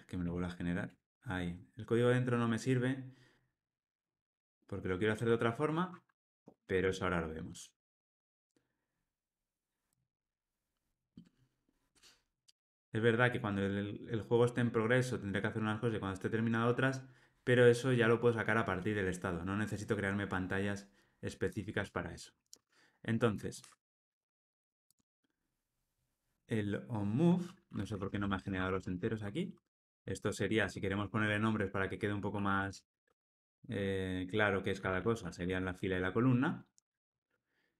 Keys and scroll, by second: 0.8 Tab, 6.3 alt+super+l, 6.8 ctrl+alt+o, 23.6 Escape, 28.9 Escape.